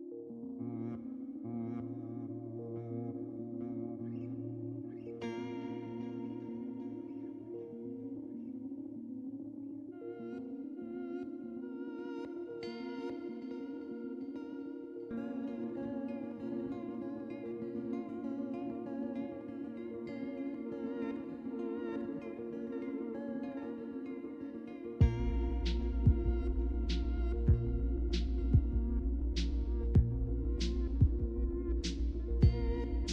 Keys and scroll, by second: 8.6 Return, 8.6 typing, 30.6 typing, 32.4-33.1 typing.